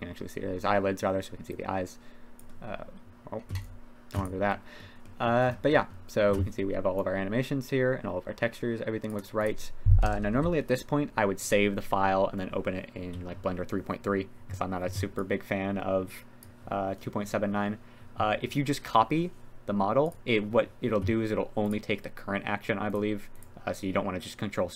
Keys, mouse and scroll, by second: 1.5-1.9 drag, 2.3 click, 2.4 middle click, 4.2 click, 4.5 click, 5.0 click, 5.7 drag, 5.7 middle drag, 7.2-9.4 drag, 10.0 KP_1, 10.3 KP_3, 11.4 click, 13.0 a, 15.4-16.7 drag, 20.0 click, 21.6 click.